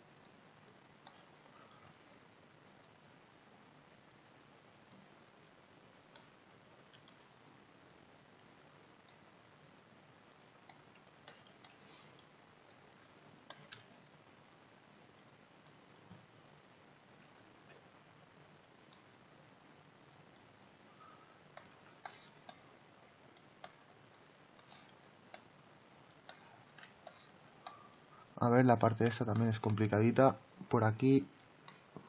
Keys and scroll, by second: 17.5 ctrl+z.